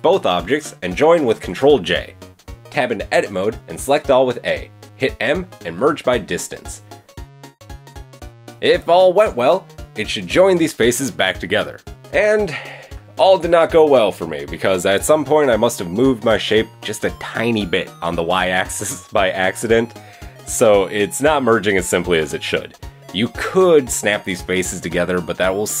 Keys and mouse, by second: 0.0 middle click, 0.2 shift+middle click, 0.5 shift+click, 0.7-2.0 middle drag, 1.9 ctrl+j, 2.0 click, 2.7 drag, 2.8 Tab, 3.2 a, 4.2 m, 6.1 Tab, 8.0 Tab, 8.8-10.0 middle drag, 10.0 a, 10.3 alt+n, 12.2 Tab, 13.5 middle drag, 15.2 Tab, 15.9-16.3 drag, 16.3 click, 17.0 g, 17.5 a, 18.8 m, 19.5 shift+click, 19.8 shift+click, 20.5 click, 21.7 KP_2, 21.8 KP_3, 22.0 KP_1, 22.3 KP_3, 22.5-23.2 shift+drag, 23.2 middle click, 23.5-25.8 drag.